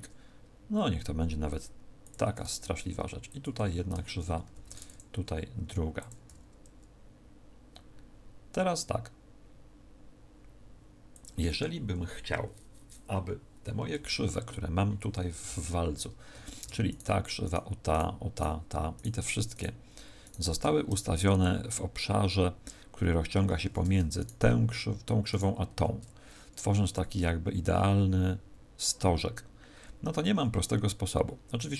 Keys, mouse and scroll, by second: 2.1 click, 2.7 ctrl+r, 4.4 ctrl+r, 6.0 click, 6.2 s, 11.1 click, 16.8 alt+shift+right click, 18.3 alt+shift+right click, 24.1 alt+shift+right click, 25.2 alt+shift+right click.